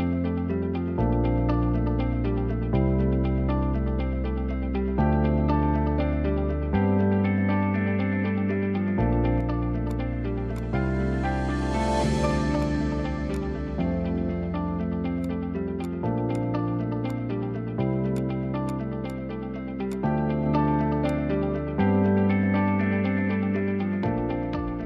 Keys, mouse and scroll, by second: 1.1 `, 1.5-1.8 scroll up 3, 2.1 l, 2.4-2.8 scroll up 1, 2.8-4.7 middle drag, 4.7 scroll down 1, 5.3 shift+middle click, 5.6 scroll up 1, 6.6-11.6 middle drag, 11.6-21.0 drag, 21.7 drag.